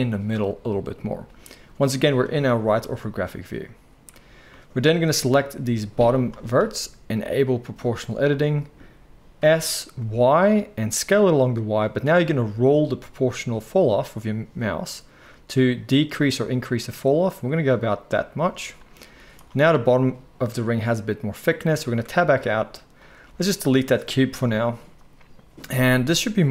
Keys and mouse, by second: 5.2-8.0 drag, 5.2-8.0 middle drag, 9.4 s, 19.1 z, 22.0 Tab, 23.2 x, 24.3 KP_1.